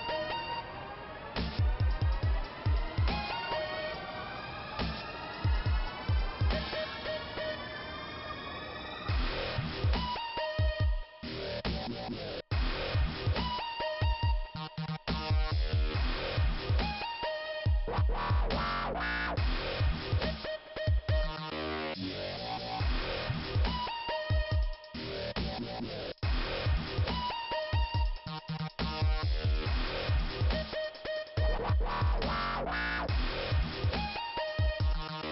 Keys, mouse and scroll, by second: 1.0 click, 2.4 click, 2.4 click, 4.3 click, 6.0 click, 6.2 click, 6.7 click, 6.7 click, 7.5 middle click, 8.5 scroll up 2, 9.4 click, 9.5 click, 16.7 Return, 21.2 click, 23.3 click, 23.7 scroll down 2, 24.3 click, 24.4 click, 27.4 middle click.